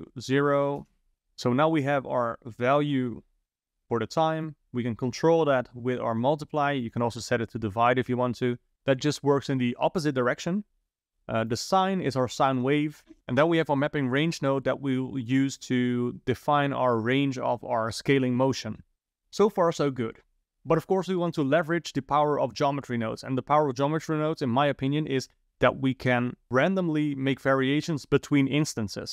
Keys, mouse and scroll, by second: 2.0 click, 4.4 click, 6.8-8.7 drag, 11.5 click, 11.8 click.